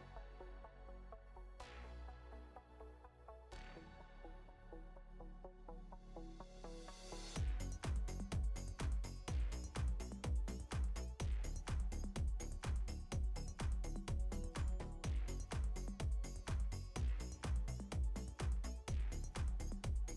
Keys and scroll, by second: 0.1 space, 5.2 space, 14.9 space, 15.6 ctrl+space, 15.7 ctrl+space, 17.8 space, 19.6 space.